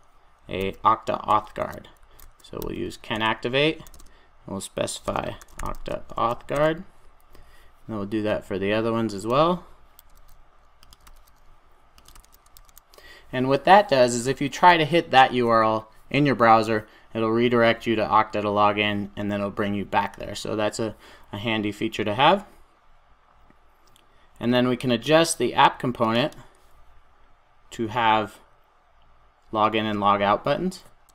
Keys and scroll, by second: 3.2 Return, 9.8 Return, 10.6 super+c, 10.9 super+v, 12.4 super+s.